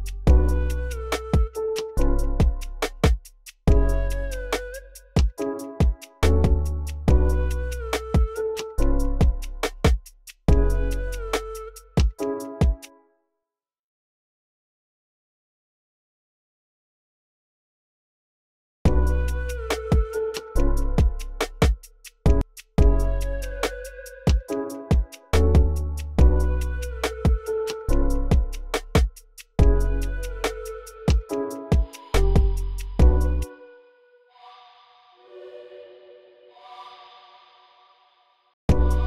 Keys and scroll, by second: 5.8 typing, 12.3 space, 18.2 v, 18.6 space, 29.7 super+k, 30.1-37.0 typing, 38.2-39.0 typing.